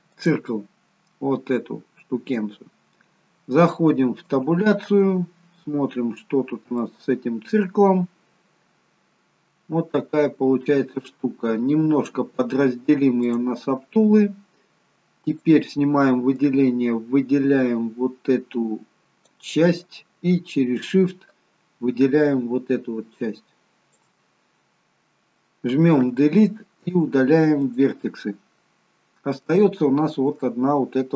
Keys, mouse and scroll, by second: 1.2-1.8 scroll up 2, 1.8-4.3 scroll down 1, 4.3 Tab, 4.3-4.9 scroll down 1, 5.1-6.7 scroll up 9, 6.7 scroll up 1, 6.8 shift+middle click, 8.0-8.7 scroll up 1, 8.7-9.3 scroll down 1, 9.7 scroll down 2, 10.0 shift+middle click, 12.0 click, 15.3 click, 16.5 click, 21.3 shift+click, 26.1 Delete, 28.9-29.4 scroll up 2, 29.6 shift+middle click.